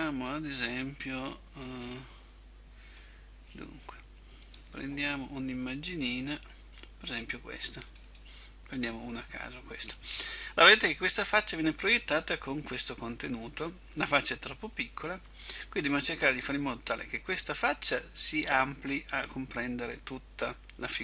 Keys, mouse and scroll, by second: 8.4 click.